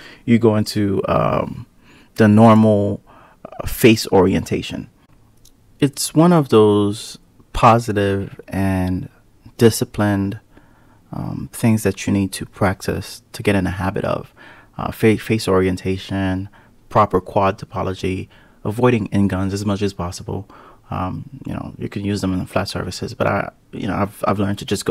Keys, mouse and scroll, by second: 2.8 ctrl+r, 7.0 Tab, 7.5 click, 8.6 click, 9.4 drag, 10.2 click, 12.5 click, 14.5 KP_Divide, 15.1-15.5 scroll down 1, 15.5 click, 15.7-16.2 scroll down 1, 16.2 click, 17.5 click, 20.2 click, 23.5-24.9 scroll up 20.